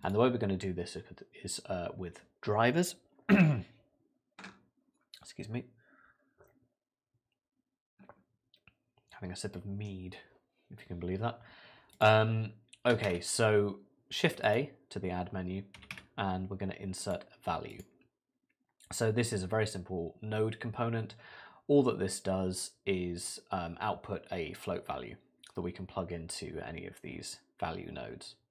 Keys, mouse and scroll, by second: 0.0 click, 11.9 click, 13.1 shift+a.